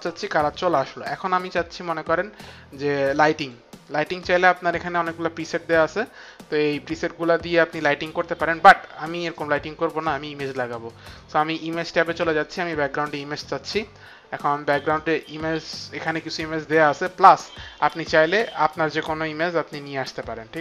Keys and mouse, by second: 3.4 click, 12.1 click, 13.7 click, 15.0 right click.